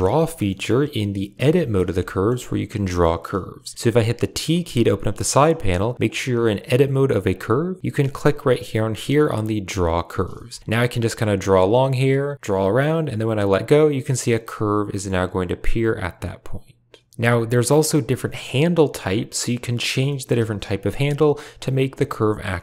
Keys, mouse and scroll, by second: 0.1 middle click, 0.3 shift+middle click, 1.3 Tab, 1.9 shift+middle click, 2.7 shift+middle click, 4.4 t, 5.9-7.3 drag, 9.7 click, 10.4 shift+middle click, 10.9-13.1 drag, 14.1 middle click, 15.3-16.5 drag, 17.0 shift+middle click, 17.1 g, 17.1 r, 19.9 shift+middle click, 20.2 r, 21.2 middle click, 21.4 click, 21.6 r.